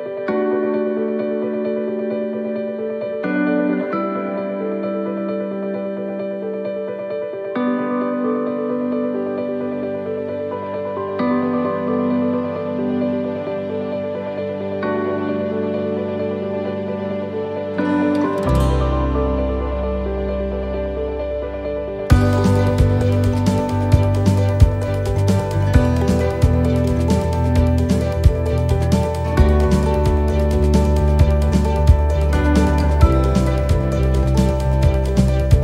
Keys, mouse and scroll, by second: 0.1 click, 3.6-4.0 scroll down 5, 4.1 shift+middle click, 6.6 shift+middle click, 8.8 scroll up 1, 9.2 shift+middle click, 12.2 middle click, 13.2 shift+right click, 15.3 click, 21.4 click, 22.9 click, 34.4 right click, 35.4 click.